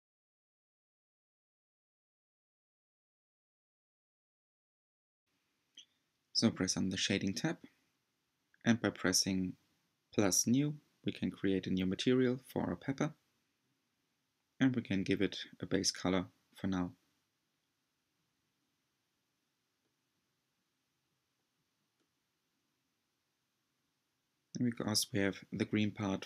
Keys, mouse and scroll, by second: 3.0 click, 5.2-6.7 middle drag, 6.7-7.8 drag, 7.8-10.2 shift+middle drag, 10.2-11.8 drag, 11.9-16.2 shift+middle drag, 16.2 click, 25.9-26.2 scroll up 3.